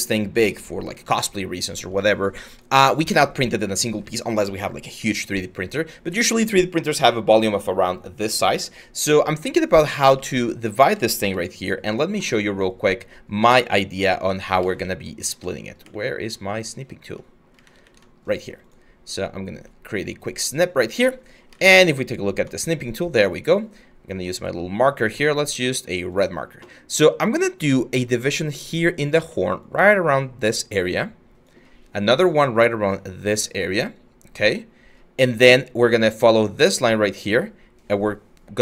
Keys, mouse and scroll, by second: 10.9 s, 14.3 alt+Tab, 14.8 alt+Tab, 16.9 alt+Tab, 17.2 alt+Tab, 21.2 alt+Tab, 28.8 ctrl+z.